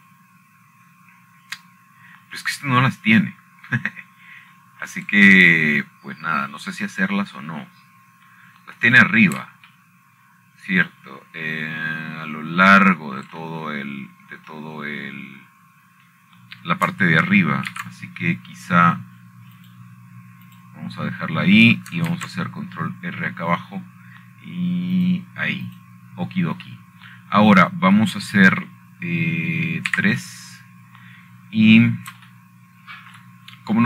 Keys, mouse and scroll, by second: 7.6 shift+middle click, 11.5 middle click, 15.9 shift+middle click, 17.3 middle click, 20.4 ctrl+r, 21.8 scroll up 2, 22.3 click, 23.2 click, 25.6-25.9 scroll up 2, 27.1-27.7 scroll up 1, 27.7-29.4 drag, 30.4 middle click, 31.3 middle click, 32.6 3.